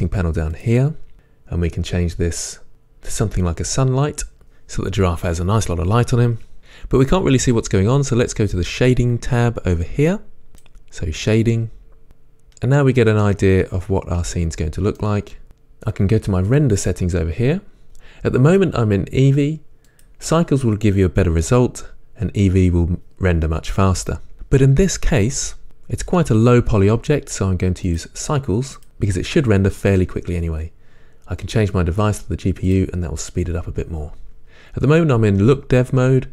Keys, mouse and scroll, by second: 0.7 click, 3.8 click, 4.4-11.2 middle drag, 11.2 click, 12.0-25.2 middle drag, 25.2-36.3 drag.